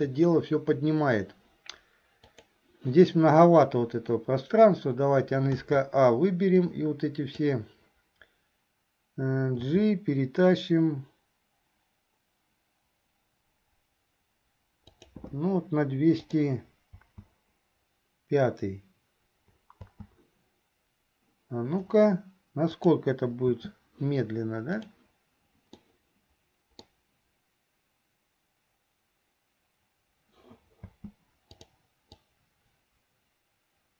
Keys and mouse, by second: 2.4 click, 6.7 click, 16.4 click, 17.2 space, 22.9 click, 23.7 space, 24.9 click, 25.9-27.0 middle drag, 30.9 space, 31.7 click, 32.4-33.9 drag.